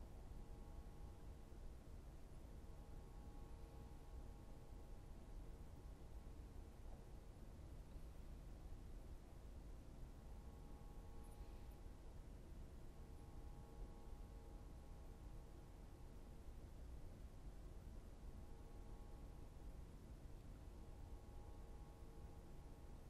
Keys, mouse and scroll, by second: 3.9 right click, 4.3-5.8 right drag, 5.8 b, 8.4 right click, 8.7 right click, 10.2 b, 13.2 right click, 14.8 b, 17.6 click, 18.1 right click, 19.5 b.